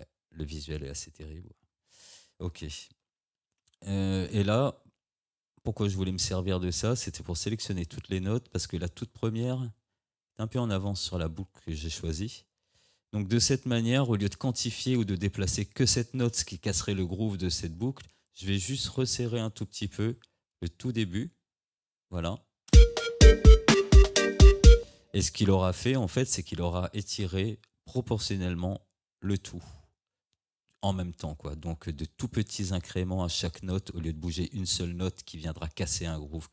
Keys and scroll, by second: 3.4 ctrl+z, 22.8 space, 24.8 space.